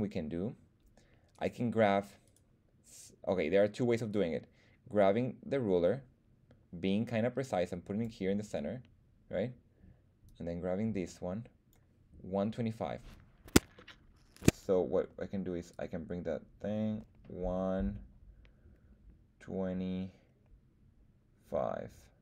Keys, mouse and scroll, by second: 1.3 right click, 2.2 right click, 4.1-8.0 drag, 10.2-11.7 drag, 13.7 shift+middle click, 14.6 scroll down 1, 15.7-22.2 drag.